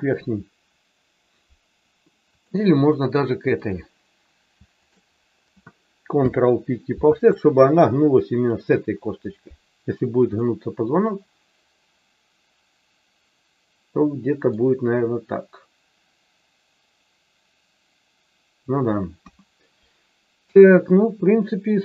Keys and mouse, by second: 2.4 click, 3.7 click, 6.1 ctrl+p, 10.4-14.5 middle drag, 19.1 KP_1.